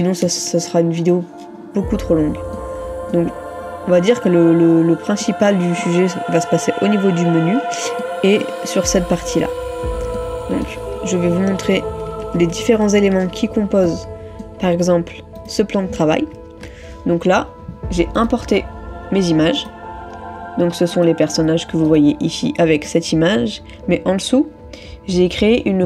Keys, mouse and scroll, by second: 0.3 ctrl++, 2.6 middle click, 12.9 ctrl++, 14.0 middle click, 16.4 middle click, 16.5 ctrl++.